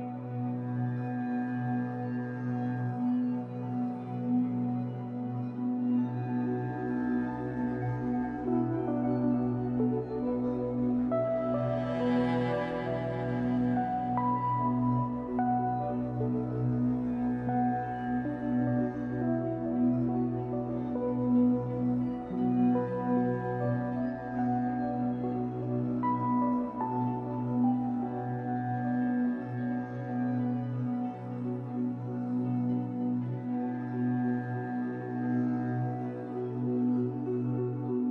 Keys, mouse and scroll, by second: 0.3 middle click, 0.7 click, 1.5 middle click, 1.8-3.2 drag, 3.0-3.6 scroll down 4, 3.2-9.7 middle drag, 4.6 scroll down 2, 6.4-6.8 scroll up 2, 8.0-9.7 scroll up 2, 9.7 click, 10.2 scroll up 2, 10.2-12.4 shift+middle drag, 10.7-11.2 scroll up 2, 12.4-16.1 drag, 16.8 click, 19.8-21.5 drag, 21.5-23.6 middle drag, 22.1 f, 23.6 click, 25.8-35.5 drag, 34.8 scroll down 1, 35.5-38.1 middle drag.